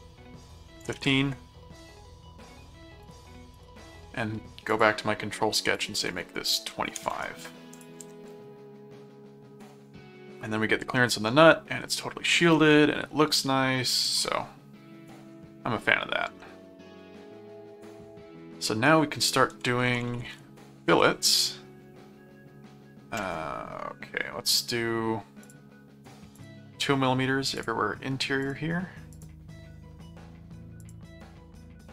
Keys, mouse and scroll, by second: 3.0 click, 4.7 click, 5.7 click, 7.7 ctrl+click, 8.0 ctrl+Tab, 9.7 middle click, 10.9 middle click, 14.0 ctrl+Tab, 15.3 middle click, 16.4-18.3 middle drag, 19.3-20.8 typing, 20.9 Return, 25.4 click, 26.4 click, 27.5 click, 28.4 click, 29.1 click, 30.8 click.